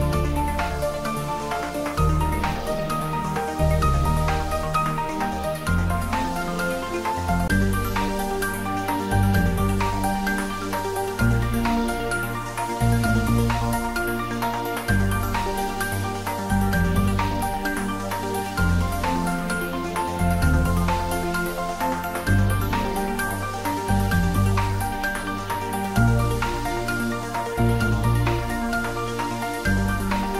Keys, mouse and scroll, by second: 0.3 Tab, 1.1 click, 1.4 Tab, 2.0 scroll up 1, 2.3-3.2 middle drag, 5.3 click, 6.6 2, 6.8 click, 10.3 shift+z, 11.4 s, 15.2 click, 15.7 g, 16.1 x, 18.5 x, 19.1-21.3 middle drag, 21.7-22.7 scroll up 1, 22.7-23.7 middle drag, 25.2 click, 26.0 s, 27.2 click, 27.7 e, 29.1 click, 29.4 s.